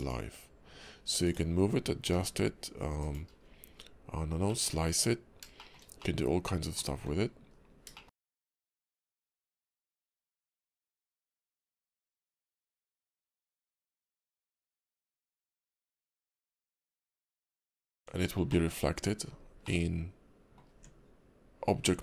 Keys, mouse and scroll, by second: 0.0 click, 1.2 click, 2.1 g, 3.3-4.2 scroll up 3, 4.5 middle click, 5.6 shift+middle click, 6.0 middle click, 6.9 `, 7.5 KP_5, 7.9 shift+middle click, 8.2 scroll up 2, 9.0 click, 15.8 click, 16.3 middle click, 16.6 scroll down 2, 17.1 KP_5, 17.8 click, 17.9 Tab, 18.5 middle click, 18.8 scroll up 1, 19.3-19.6 scroll down 2, 19.6 middle click, 20.7 Tab, 21.6 scroll up 2.